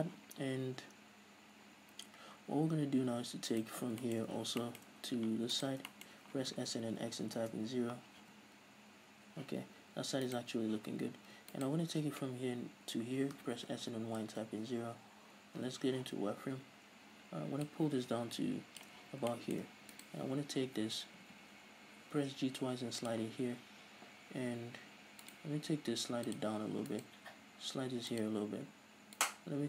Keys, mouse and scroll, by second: 3.7 right click, 4.1 scroll down 2, 4.2-5.7 shift+middle drag, 4.5 z, 5.1-5.7 scroll up 2, 5.7 ctrl+right drag, 6.1-6.5 shift+middle drag, 6.5 s, 8.4 z, 8.8-10.4 middle drag, 10.4 right click, 11.9 ctrl+right click, 13.4 s, 14.8 Return, 16.3 z, 17.8-19.5 drag, 19.2 z, 19.5-20.1 shift+middle drag, 20.1 right click, 21.4 g, 23.3 click, 25.4 right drag, 25.7 g, 26.6 click, 27.1 right click, 27.4 g, 28.4 click, 29.3 right click.